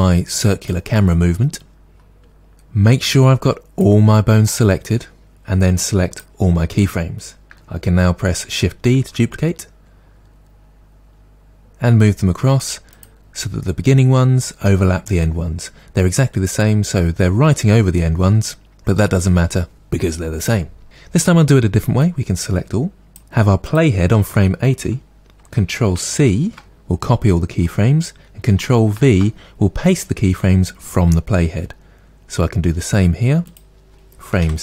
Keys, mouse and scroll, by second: 1.9 scroll up 1, 9.0 shift+d, 11.0 shift+d, 13.0 click, 22.1 click, 23.7 click, 26.3 ctrl+c, 31.6 ctrl+v, 33.5-34.6 drag, 34.5 Left.